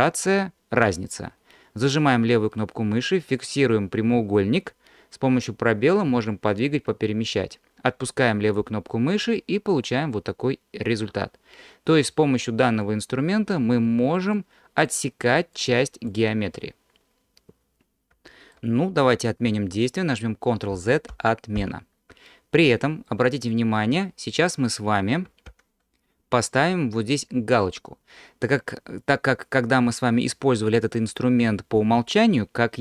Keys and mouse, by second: 2.1-8.7 drag, 9.4 middle click, 10.0-12.4 drag, 10.0-11.8 right drag, 12.9 click, 14.5 click, 15.7 click, 16.6-18.5 drag, 16.6-18.2 right drag, 20.8 ctrl+z, 21.1 ctrl+z, 21.6 ctrl+z, 23.1 shift+click, 25.5 ctrl+z.